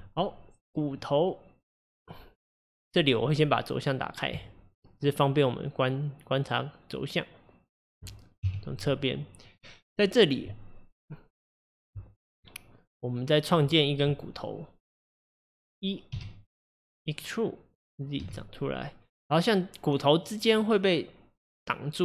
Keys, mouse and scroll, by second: 0.4 scroll up 2, 1.0-4.0 middle drag, 4.3 click, 5.1-8.3 middle drag, 8.5 KP_3, 9.6 click, 16.2 e.